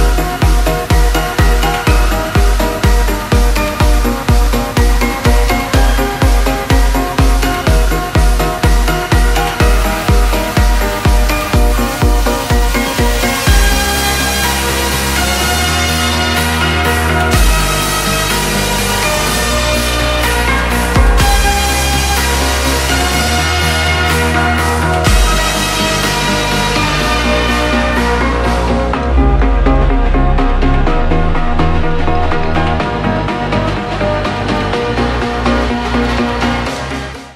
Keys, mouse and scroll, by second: 0.2 click, 3.2-7.5 drag, 7.6-27.8 drag.